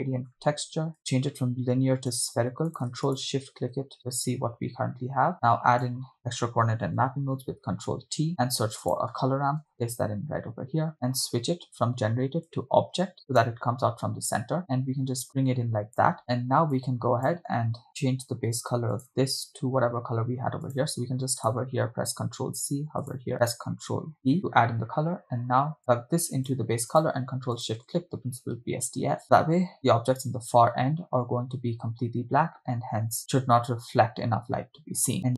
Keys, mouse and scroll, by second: 1.0-2.4 drag, 1.0-2.1 scroll up 2, 2.9 click, 3.5 ctrl+shift+click, 5.9 click, 7.2 ctrl+t, 8.5 shift+a, 10.9 drag, 12.5-13.7 drag, 14.6 click, 16.2-16.5 scroll down 2, 17.1 drag, 17.9 click, 17.9 middle click, 17.9 scroll up 3, 19.0 click, 20.7 click, 22.4 ctrl+c, 23.1 click, 24.2 ctrl+v, 25.8-26.6 drag, 27.0 ctrl+click, 27.8 ctrl+shift+click.